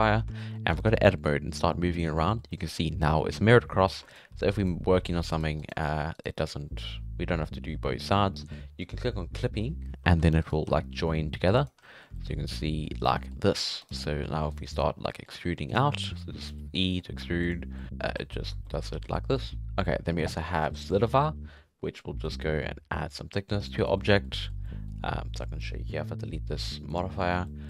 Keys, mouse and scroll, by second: 0.0 click, 0.4-0.8 shift+middle drag, 0.8 Tab, 1.3 g, 2.1 scroll down 2, 2.2 middle click, 2.5 scroll up 1, 3.9 1, 4.1 right click, 4.3 g, 4.6 right click, 4.9 g, 5.6 right click, 6.4 right click, 9.4 click, 10.0 3, 10.2 2, 10.4 right click, 10.7 g, 11.8 scroll up 1, 11.8 middle click, 12.4 scroll up 1, 12.5-13.6 middle drag, 13.6 3, 13.8 right click, 13.9-14.3 scroll down 1, 14.3 e, 15.1 middle click, 15.7 right click, 16.0 middle click, 16.4 right click, 16.6 shift+middle click, 17.1 e, 17.8 middle click, 18.1 alt+a, 18.2 middle click, 18.5 Tab, 18.7-19.0 middle drag, 19.0 alt+a, 19.2 middle click, 20.9-23.8 drag, 23.8 right click, 24.0-24.6 middle drag, 24.6-24.9 scroll up 2, 24.9 scroll down 5, 25.1 Tab, 25.4 middle click, 25.6 Tab, 26.9 click, 27.4 scroll up 4, 27.5-27.6 middle drag.